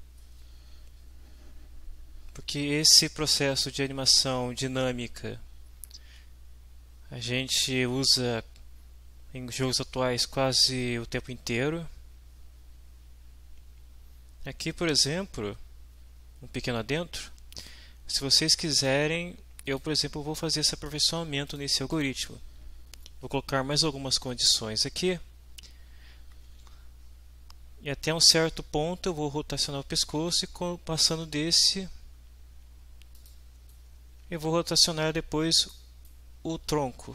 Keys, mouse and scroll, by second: 8.1-10.6 middle drag, 19.6 click, 21.4-21.8 scroll up 1, 21.9 click, 31.0 click, 33.2 click, 33.7-35.9 right drag, 36.1 middle drag, 36.2 right click, 36.2 middle click, 36.4 right click, 36.6 w.